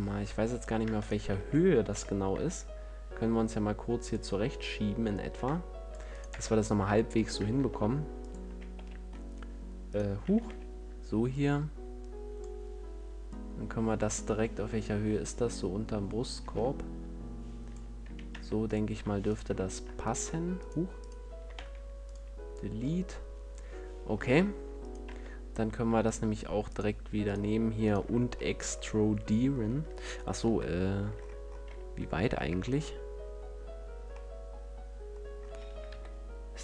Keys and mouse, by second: 1.2 shift+d, 4.0-6.9 drag, 6.0 right click, 6.2 Tab, 6.9 middle click, 7.4 ctrl+Tab, 8.3 a, 8.7 b, 10.1 z, 13.1-17.6 drag, 17.9 a, 18.2 Tab, 21.4 x, 22.0 click, 22.7-24.7 middle drag, 24.9 Tab, 30.3 KP_3, 31.5 z, 35.8 KP_3.